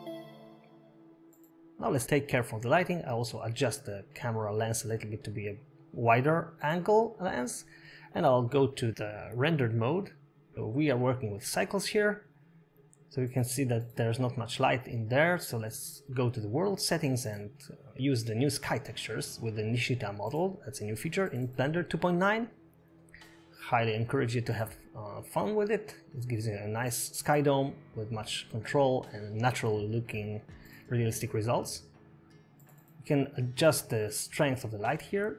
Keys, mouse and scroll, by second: 1.0 click, 1.0 scroll down 6, 1.1 click, 1.7 2, 2.8 g, 4.5-5.2 scroll up 9, 5.2 click, 5.2 shift+middle click, 5.2 scroll down 4, 7.0-7.5 scroll down 5, 7.5 click, 7.8 scroll down 2, 8.4 shift+middle click, 9.7 click, 10.0-10.4 scroll down 2, 10.6 shift+middle click, 15.2 click, 16.7 scroll up 5, 18.7 click, 20.8 middle click, 21.9 scroll down 1, 22.0 shift+a, 25.0 click, 26.5 middle click, 26.5 scroll down 2, 28.0 click, 29.8 middle click, 29.8-30.8 scroll down 6, 30.0 middle click, 30.9 middle click, 33.8 click, 34.3 click.